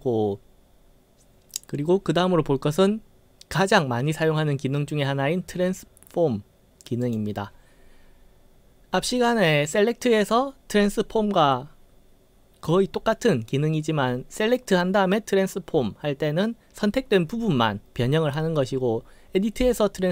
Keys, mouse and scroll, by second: 7.1 click.